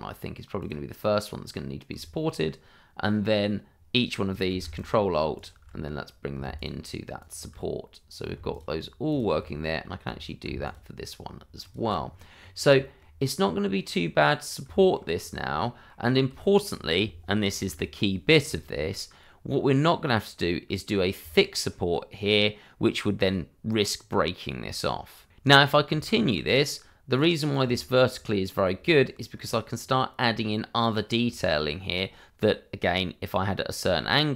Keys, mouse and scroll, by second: 0.5 click, 1.4 scroll up 1, 4.7 ctrl+alt+click, 6.5 ctrl+alt+click, 8.5 ctrl+alt+click, 10.6 ctrl+alt+click, 11.6 ctrl+alt+click, 12.0-12.3 scroll down 1, 12.8 shift+middle click, 13.8 right click, 14.9 shift+middle click, 15.1-15.5 scroll up 1, 15.5 shift+middle click, 15.9 scroll up 1, 16.3 shift+middle click, 17.7 shift+middle click, 21.2 shift+middle click, 25.3-25.6 scroll down 1, 25.9 shift+middle click, 27.1 right click, 27.8 middle click, 28.9 shift+middle click, 29.7-30.1 scroll down 1, 31.3 shift+middle click, 33.9 shift+middle click.